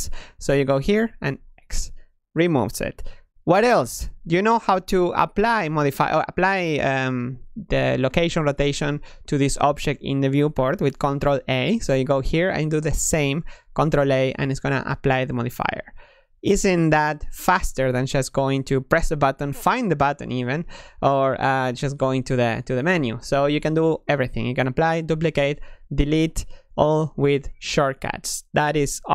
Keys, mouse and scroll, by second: 1.2 x, 4.0 g, 4.5 r, 5.3 g, 10.7 ctrl+a, 14.0 ctrl+a, 18.0 ctrl+z, 21.1-25.5 drag, 25.5 Escape.